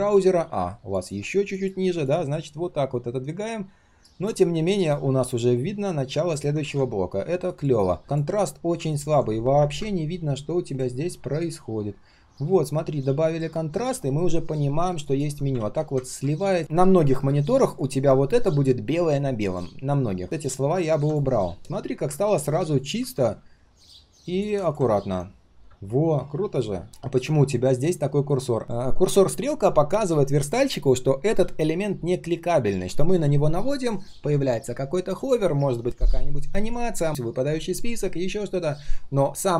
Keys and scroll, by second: 6.6 ctrl+z, 9.6 ctrl+\, 15.5 ctrl+z, 16.0 ctrl+z.